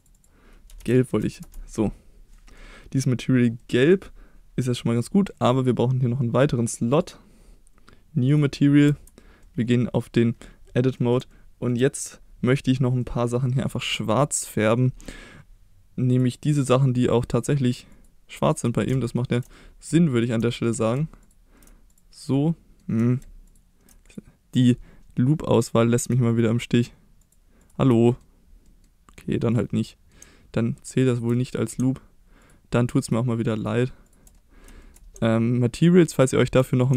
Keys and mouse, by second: 0.1-1.9 drag, 2.3 middle click, 3.6-3.9 middle drag, 4.7 middle click, 7.0 click, 8.3 click, 8.9 Tab, 9.4 middle click, 11.0 middle click, 11.3-11.7 shift+middle drag, 13.0-13.7 middle drag, 16.1 drag, 16.5 middle click, 17.9 click, 19.5 middle click, 20.1 shift+middle click, 20.5 middle click, 21.9 click, 22.3 middle click, 24.0 click, 27.6 alt+click, 28.7 middle click, 29.9 middle click, 31.3 middle click, 33.6 ctrl+click, 34.4 middle click, 34.8 shift+middle click, 36.2 ctrl+click, 36.6 middle click.